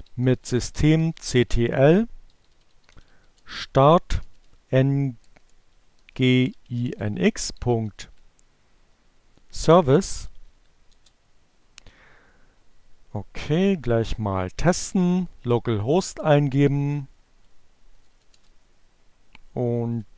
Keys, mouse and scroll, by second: 0.0-3.6 typing, 5.1-8.8 typing, 10.0-10.9 typing, 13.5 click, 14.4 right click, 15.6-16.7 drag, 17.0 click, 19.1 Return.